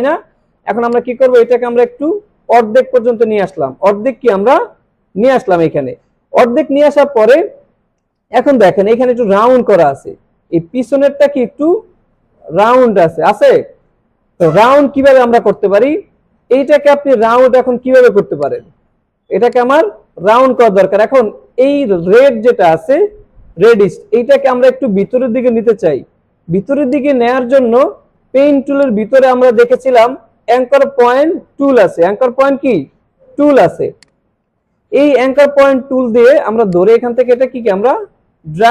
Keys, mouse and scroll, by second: 0.9-3.3 drag, 8.9 click, 15.3 click, 17.9 alt+scroll up 1, 18.3 space, 18.4-18.9 click, 18.9 space, 19.1 alt+scroll down 1, 19.5 space, 19.6 click, 26.9 click, 28.8 right click, 34.0 click, 36.7-38.7 drag.